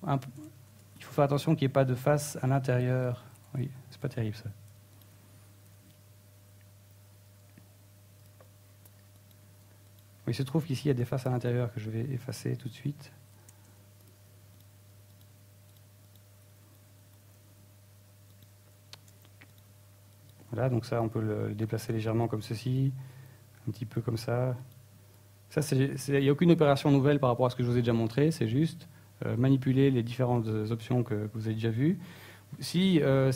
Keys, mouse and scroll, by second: 0.1 shift+middle click, 0.6 e, 2.0 click, 2.6 ctrl+Tab, 4.6 ctrl+Tab, 5.3 right click, 5.7 middle click, 6.5 right click, 6.9 middle click, 7.2 ctrl+z, 7.5 ctrl+z, 7.7 ctrl+z, 7.9 ctrl+z, 8.8 shift+right click, 9.5 e, 12.1 click, 12.3 middle click, 13.1 right click, 13.7 shift+right click, 14.1 middle click, 14.6 x, 15.7 middle click, 16.5 right click, 17.3 ctrl+Tab, 18.3 right click, 18.9 shift+right click, 19.5 right click, 19.9 shift+right click, 20.3 middle click, 20.7 shift+middle click, 20.8 shift+a, 22.0 right click, 22.8 a, 23.2 right click, 23.8 shift+right click, 24.7 click, 26.4 right click, 27.0 click, 28.2 right click, 28.9 click, 30.1 middle click, 32.1 middle click.